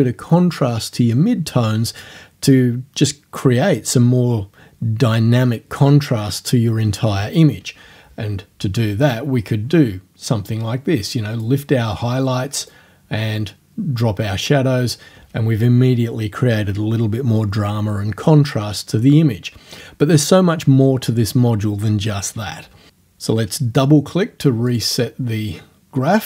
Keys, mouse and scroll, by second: 9.2-11.6 drag, 12.7-14.7 drag, 24.7 click.